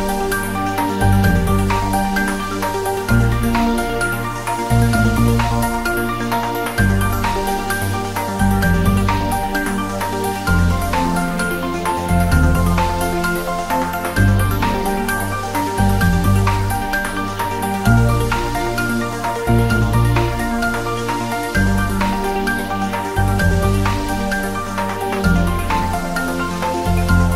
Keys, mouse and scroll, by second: 1.1 click, 3.5 scroll down 1, 3.9 click, 4.5 ctrl+s, 4.9 click, 6.4-6.7 scroll down 1, 6.7 click, 7.6-8.4 scroll up 1, 10.9 click, 15.3 click, 16.3 scroll down 1, 17.0 click, 18.4-18.7 scroll up 1, 19.4 click, 19.6-20.1 scroll down 1, 20.5 Tab, 20.7 click, 21.1 3, 21.2 click, 24.4 click, 24.9-25.5 scroll down 1.